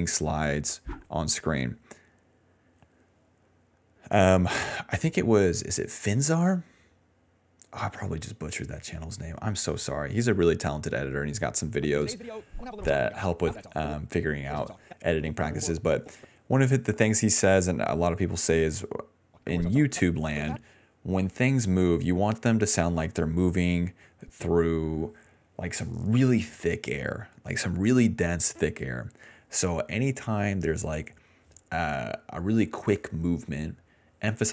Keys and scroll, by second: 0.5 space, 0.7 space, 1.1 space, 5.5 space, 6.6 space, 7.3 space, 9.8 ctrl+s, 11.8 space, 13.9 space, 14.4 space, 14.8 space, 18.9-20.5 typing, 21.9 s, 22.0 s, 23.6 d, 23.7 d.